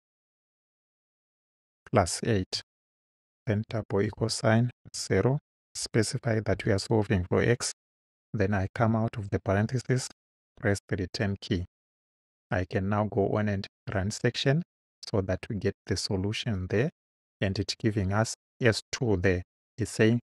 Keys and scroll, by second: 2.6 8, 3.7 =, 4.8 0, 5.7 ,, 6.6 x, 8.8 Right, 10.4 Return.